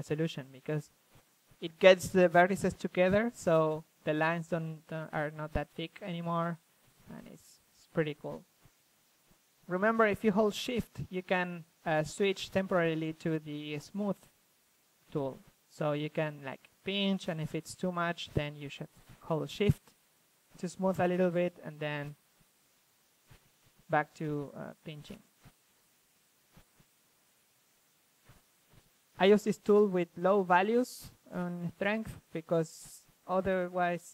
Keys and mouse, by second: 0.1 click, 1.3 click, 1.5-2.5 middle drag, 2.5-3.6 drag, 4.5-5.7 drag, 7.3 f, 7.6-8.4 drag, 8.4 f, 9.5 click, 13.0-14.3 drag, 15.6-17.0 drag, 17.5-19.5 middle drag, 19.5-25.5 drag, 25.5-27.6 middle drag, 27.6-28.5 drag, 30.8 middle drag, 32.5-33.6 drag, 32.5-33.3 middle drag, 33.4 middle drag, 33.8-34.1 drag, 33.8-34.1 middle drag.